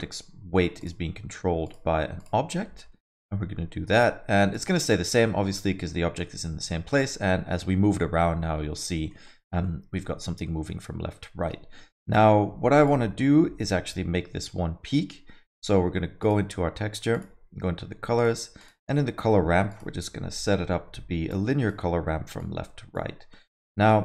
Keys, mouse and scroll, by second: 1.6 click, 2.6 alt+middle click, 2.9 middle click, 3.2 alt+middle click, 3.9 click, 4.5 click, 4.8 alt+middle click, 5.9 g, 9.1 middle click, 9.4 scroll down 1, 9.6 alt+middle click, 10.4 middle click, 12.8 click, 16.2 click, 17.1 click, 18.2 click, 18.6 click, 19.7 click, 22.4 click, 23.6 ctrl+click, 23.9 click.